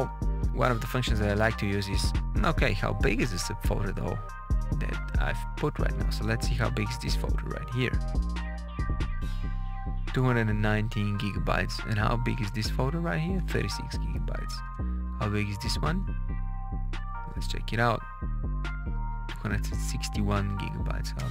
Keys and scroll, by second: 4.8 Down, 5.7 Down, 6.9 space, 9.4 Up, 9.9 Down, 10.5 space, 10.9 Up, 12.3 space, 13.1 Up, 13.4 Down, 13.5 space, 13.9 Up, 14.5 space, 18.8 space, 19.1 Up, 19.4 Down, 20.3 Up, 21.1 space.